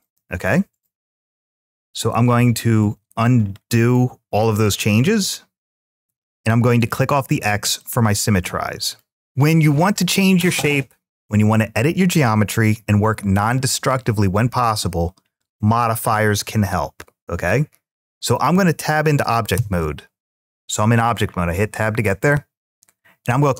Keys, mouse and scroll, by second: 0.9 ctrl+z, 1.3 ctrl+z, 1.7 ctrl+z, 2.2 ctrl+z, 3.7 middle click, 5.1 ctrl+z, 5.5 ctrl+z, 6.6 click, 7.6 middle click, 8.6 click, 9.1 click, 10.2 click, 19.3 Tab.